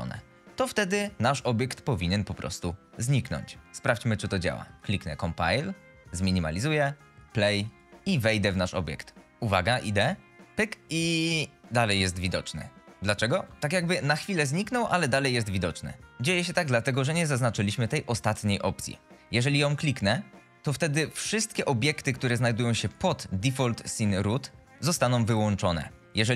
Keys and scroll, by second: 9.5 w, 14.3 shift+Escape, 14.8 F11.